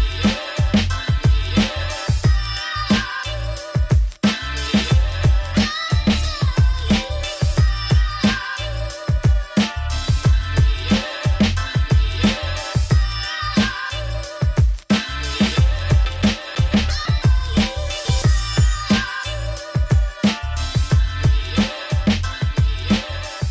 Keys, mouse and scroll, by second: 1.0-1.3 scroll down 2, 1.3 alt+d, 2.8 middle click, 3.6 alt+d, 4.8 alt+d, 7.0 click, 7.1 alt+d, 10.2 g, 11.0 alt+d, 12.1 click, 12.2 middle click, 12.5 scroll down 4, 12.7 middle click, 13.2 shift+scroll down 1, 13.2 scroll up 3, 13.5 click, 13.5 middle click, 13.8 alt+d, 15.0 alt+d, 15.5 scroll down 3, 15.7 middle click, 16.3 alt+d, 17.7 alt+d, 20.9 g, 21.8 middle click, 22.4 alt+d, 23.4 middle click.